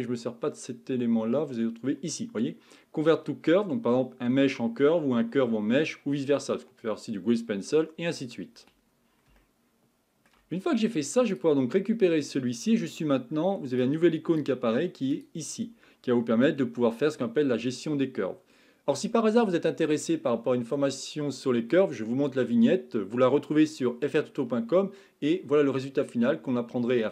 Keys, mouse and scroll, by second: 9.4-11.3 shift+middle drag, 11.3 click, 13.8-14.5 drag, 14.6 click, 16.9-18.4 scroll down 4.